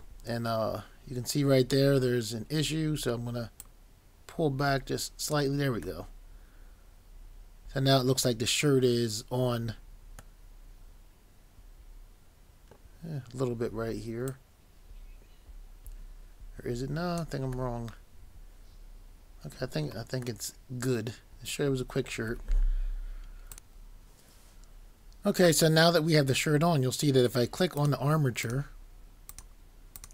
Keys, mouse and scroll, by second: 0.7 scroll, 3.6 click, 6.0 middle click, 14.3 click, 17.8 middle click, 23.5 click.